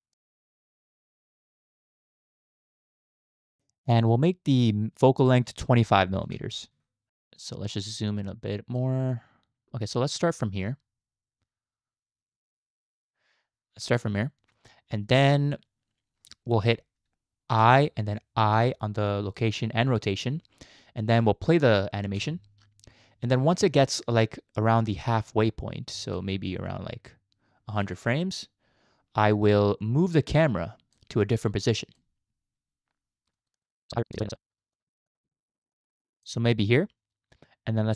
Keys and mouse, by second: 0.1 click, 0.4 click, 0.8 click, 1.2 click, 1.4 click, 1.9 click, 2.1 click, 2.5 click, 2.7 click, 5.3-6.7 drag, 7.4 click, 8.1 click, 9.1-14.0 drag, 9.1-14.0 middle drag, 17.5 i, 18.6 i, 22.2 space, 25.9 space, 26.1-27.9 drag, 30.4 click, 31.2 click, 33.3 click, 33.5 click, 33.7 click, 33.9 click, 34.1 click, 34.2 click, 34.7 click, 35.1 click, 35.3 click, 35.7 click.